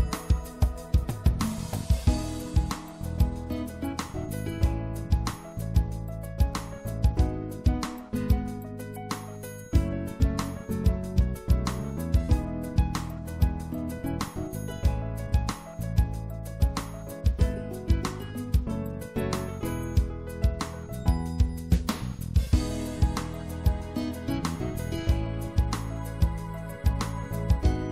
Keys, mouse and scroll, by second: 4.8-6.1 drag, 6.1 right click, 6.6-8.5 drag, 8.9 w, 9.9 w, 10.7 w, 12.3-13.7 middle drag, 14.0 middle click, 14.5-16.6 middle drag, 15.4 c, 16.7 click, 17.5 x, 18.2-20.1 drag, 18.2 right click, 18.8 c, 27.3-27.9 middle drag.